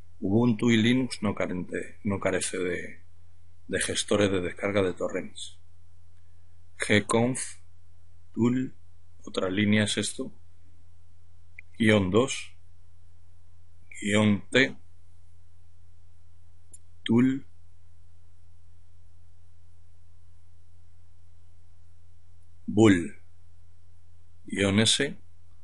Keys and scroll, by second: 1.2 typing, 3.7-8.1 typing, 9.2-9.9 typing, 11.7-12.5 typing, 14.9-16.5 typing, 19.0-21.2 typing, 23.0-23.6 typing, 25.3-25.6 typing.